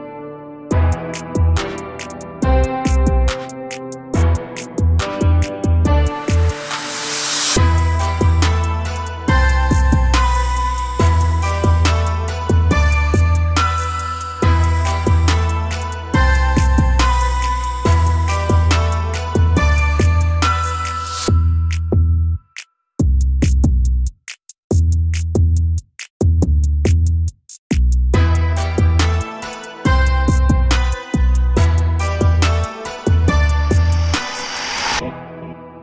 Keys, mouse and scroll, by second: 0.1 click, 0.6 Tab, 2.3 click, 2.7 middle click, 3.1-3.8 scroll up 2, 3.9-5.0 middle drag, 5.0 2, 5.1 click, 5.7 shift+click, 8.0 ctrl+KP_Add, 9.4 r, 11.6 g, 13.0 a, 13.1 a, 13.3-13.7 scroll down 1, 13.7 middle click, 14.1 scroll up 2, 14.4-15.6 shift+middle drag, 15.6 click, 16.3 shift+click, 16.8 ctrl+KP_Add, 17.9 r, 19.5 g, 21.2 a, 21.4 a, 21.6-22.0 scroll down 1, 22.0 middle click, 22.5 Tab, 22.8 scroll down 1, 22.9 a, 23.1 a, 25.1-25.5 scroll up 1, 25.5-26.4 middle drag, 26.4-26.9 scroll up 1, 26.9-27.3 shift+middle drag, 27.3-27.8 scroll up 2, 27.8 click, 29.1 Tab, 30.2 l, 31.2 r, 32.9 a, 33.1 a, 34.3 l.